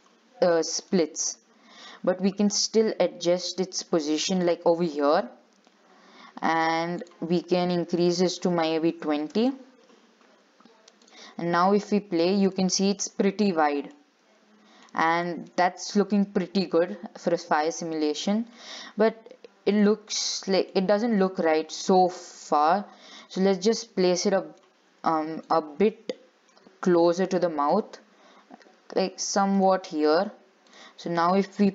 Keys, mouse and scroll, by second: 1.0 click, 2.8 g, 5.1-5.6 scroll down 5, 5.9 scroll up 2, 6.8-12.5 drag, 12.5 scroll down 5, 12.7 shift+middle click, 13.2-13.5 scroll up 5, 14.2-15.3 middle drag, 15.3 scroll down 4, 15.5 shift+middle click, 15.8-16.1 scroll up 5, 16.3-19.4 middle drag, 19.9 click, 20.4 shift+middle click, 20.7 scroll up 2, 20.9-23.3 middle drag, 23.3 click, 24.0 scroll down 1, 24.1-25.6 middle drag, 25.6 click, 26.2 scroll down 2, 26.4 shift+middle click, 26.7-27.3 scroll up 4, 27.7 g, 30.9-31.7 drag.